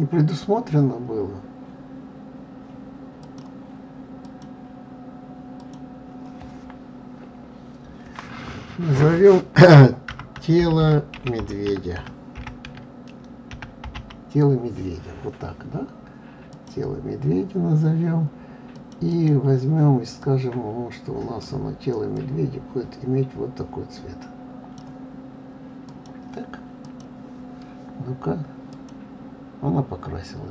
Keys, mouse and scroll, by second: 3.2 click, 4.2 click, 5.6-8.6 drag, 19.1 click, 25.8 click, 26.8 click, 28.7 click.